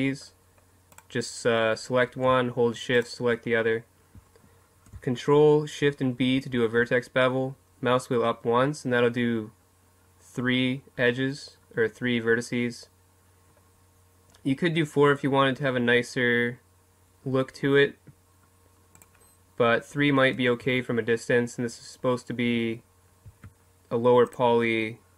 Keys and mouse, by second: 19.0-21.3 drag, 20.6 Tab, 23.3 Tab.